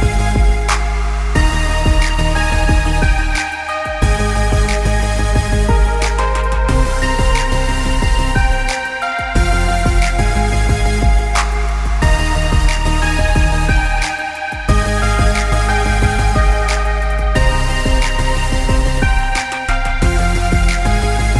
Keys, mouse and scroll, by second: 2.4 click, 5.7 alt+scroll down 1, 8.2 click, 9.8 alt+scroll up 1, 10.3 click, 17.0 click, 19.9 alt+scroll down 1.